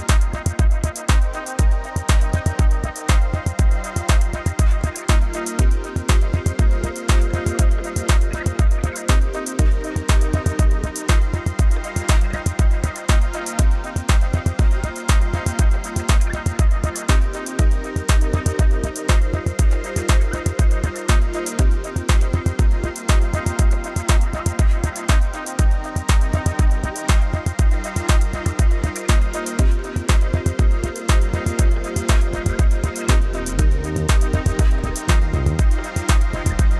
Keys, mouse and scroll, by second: 3.2 v, 3.5 click, 5.9-7.3 typing, 6.4 click, 7.3 click, 8.3 Left, 9.2 Right, 11.1 click, 14.7 click, 16.5 click, 21.3 click, 21.7 click, 23.0 space, 23.2 a, 23.3 click, 23.6 v, 23.7 click, 25.9 a, 27.4 click, 28.9 space, 28.9 click, 29.2 a, 30.4 click, 31.2 v, 32.0 click, 32.8 shift+click, 33.4 space, 33.5 click.